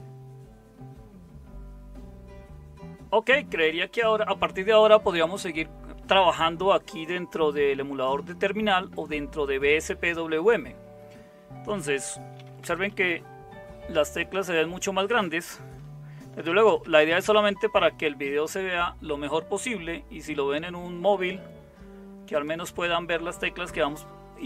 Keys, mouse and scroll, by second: 12.1-13.6 typing, 15.7-17.0 typing.